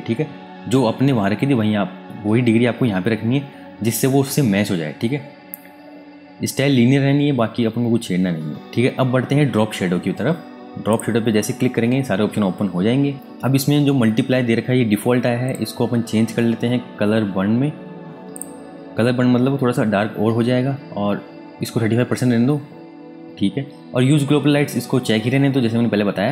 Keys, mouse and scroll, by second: 10.8 click, 13.1 Tab, 15.4 click, 18.3 click.